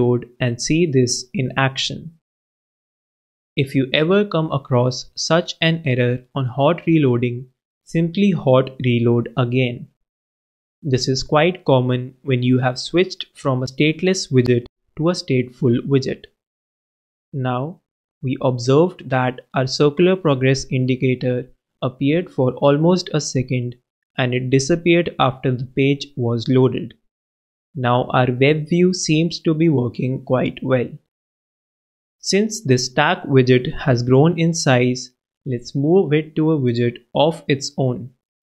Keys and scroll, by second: 11.0 super+s, 35.9 shift+super+x, 36.6 super+x, 37.3 shift+super+v, 37.4-38.5 typing.